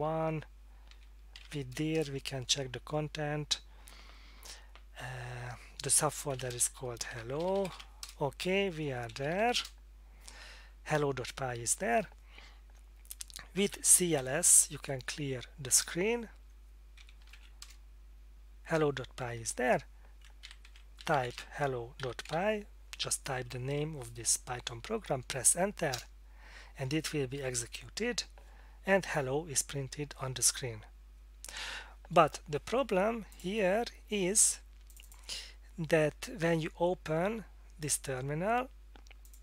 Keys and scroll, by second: 0.6-2.0 typing, 6.2-9.9 typing, 13.8-14.7 typing, 15.8 Return, 16.7-17.8 typing, 20.4-22.8 typing, 25.9 Return.